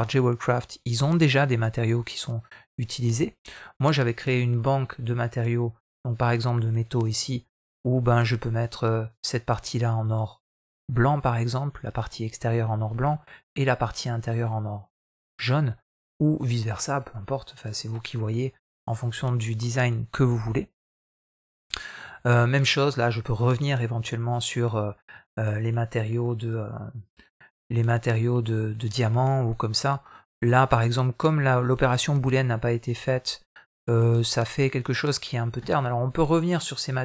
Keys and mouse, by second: 4.5-5.1 drag, 7.1-17.3 middle drag.